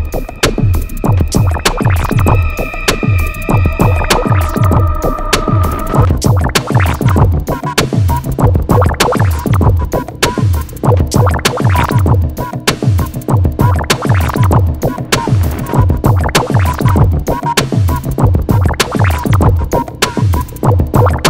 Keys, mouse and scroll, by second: 0.1 click, 6.3 click, 7.4 Escape, 9.3 click, 12.4 scroll up 1, 13.8 click, 17.9 click, 18.3 scroll down 1, 18.7 Escape, 19.2 click, 19.6 scroll up 1, 20.3 scroll down 1.